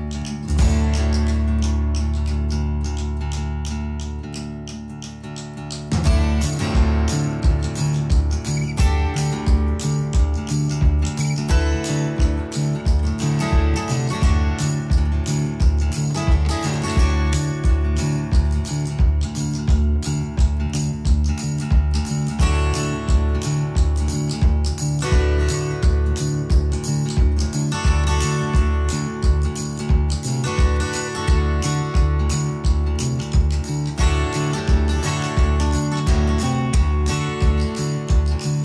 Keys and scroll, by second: 0.1-2.2 typing, 3.6 4, 4.9 6, 5.6 Return, 6.3 space, 9.0 p, 10.2-11.0 typing, 13.3 Return, 13.9 space, 15.3 ctrl+g, 19.5 m, 27.3 space, 27.8 s, 33.9 space.